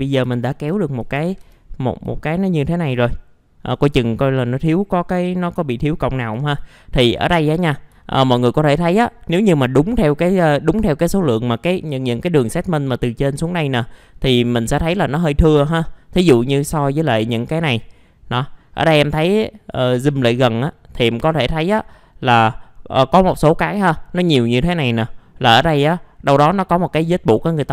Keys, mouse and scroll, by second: 0.0 middle click, 0.2 F4, 0.7 alt+middle click, 1.2 alt+f, 1.4 alt+z, 2.1 alt+middle click, 2.8 scroll up 1, 3.1 alt+middle click, 4.0 alt+middle click, 5.0 alt+middle click, 5.8 alt+middle click, 6.3 scroll down 1, 6.7 alt+middle click, 8.0 alt+middle click, 8.9 alt+middle click, 10.0 alt+middle click, 10.5 alt+middle click, 14.3 click, 21.4-22.0 scroll up 1.